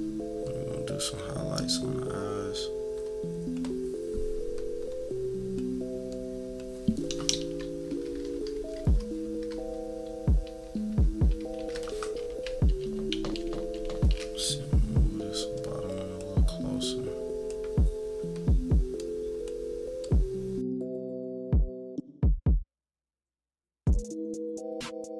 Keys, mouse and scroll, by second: 0.5-3.5 drag, 4.9 click, 6.1-8.1 drag, 8.1-9.5 typing, 10.3 scroll up 1, 10.6 =, 10.9 =, 11.2 =, 11.5 =, 12.8 z, 13.1 z, 13.4 z, 13.7 z, 15.6 click, 16.8-21.0 drag, 21.0 -, 21.3 -, 21.6 =, 22.1 click, 22.4 click, 22.5 click, 22.8-24.3 typing, 22.9-23.4 scroll down 4, 23.9 scroll down 2, 25.1 click.